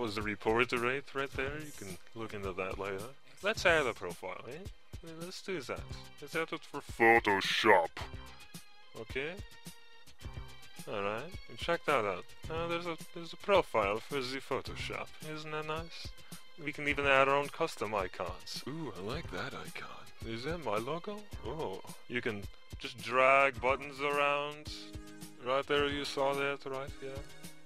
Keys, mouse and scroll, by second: 3.0-4.8 typing, 5.6 click, 8.9-10.5 typing, 10.3 click, 19.5 Insert, 20.2-22.5 drag, 23.0 Insert, 25.2-26.3 drag, 26.6-27.6 typing, 27.3 click.